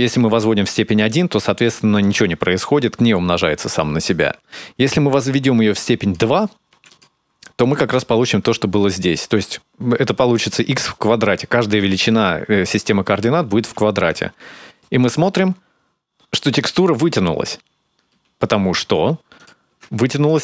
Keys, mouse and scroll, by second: 0.9 click, 5.8 click, 7.4 click, 19.2 ctrl+shift+click, 20.1 shift+click.